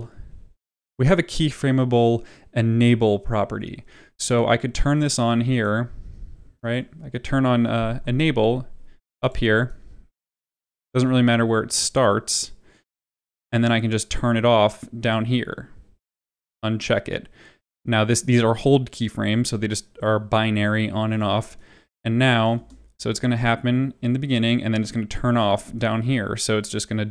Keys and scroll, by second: 8.0 u, 22.5 space.